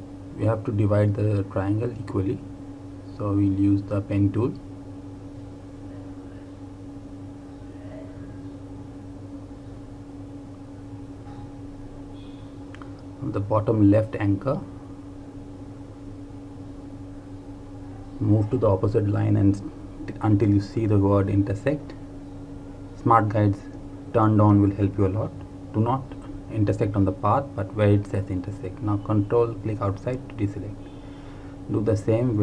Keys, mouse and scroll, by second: 3.2 click, 12.0 click, 15.1 click, 26.1 click, 28.8 ctrl+Num_Lock, 29.2 ctrl+click.